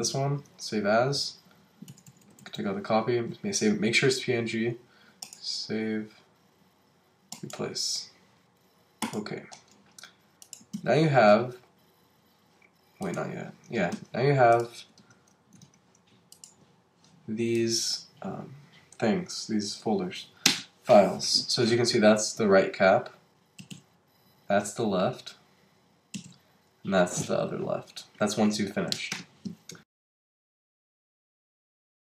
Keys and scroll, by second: 1.4 Right, 10.7 super+w, 13.9 super+w, 23.6 Up.